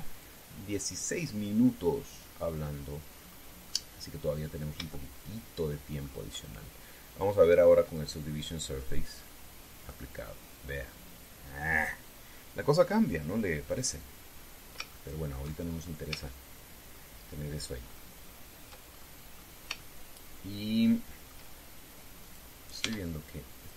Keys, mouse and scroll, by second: 0.9 click, 3.8-4.3 scroll up 2, 5.6-6.9 shift+middle drag, 8.6 click, 10.5 click, 14.5 click, 15.1 scroll down 2, 15.6 shift+middle click, 16.4-16.8 shift+scroll up 3, 17.0 shift+middle click, 18.0-18.4 shift+scroll down 2, 18.6-19.0 shift+scroll up 2, 19.6 shift+scroll up 2, 20.1 scroll down 2, 20.5-22.2 shift+middle drag, 23.0 right click, 23.6 Tab.